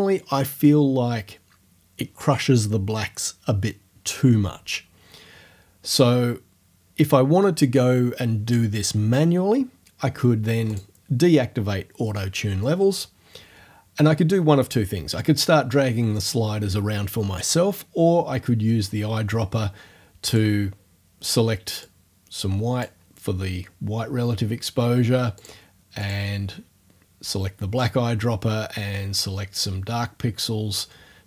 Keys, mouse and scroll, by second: 10.7 click, 20.3 click, 21.8-23.0 drag, 25.4 click, 26.0 click, 29.6-31.0 drag.